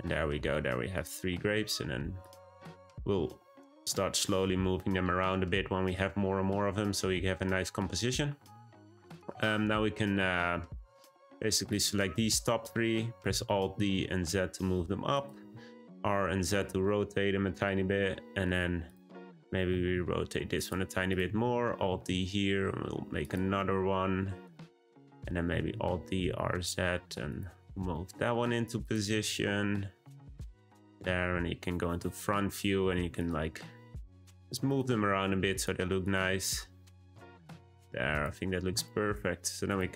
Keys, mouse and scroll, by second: 0.1-0.9 scroll up 3, 0.9 click, 1.3 g, 2.6 click, 2.9 g, 5.5-8.6 scroll down 2, 9.3-11.1 middle drag, 11.1 shift+click, 11.7 shift+click, 13.3 alt+d, 15.3 r, 17.9-18.8 middle drag, 18.8 click, 19.2-19.6 middle drag, 19.6 r, 21.0 click, 21.4 alt+d, 23.6-24.9 middle drag, 24.9 click, 25.7 alt+d, 27.9-28.8 middle drag, 28.8 click, 29.0 r, 30.6-31.0 middle drag, 32.6-33.2 scroll up 1, 33.2 click, 33.5 g, 34.7 click, 34.9 g, 36.0 click, 36.2 g, 38.1 click, 38.8-39.7 middle drag, 39.7 drag.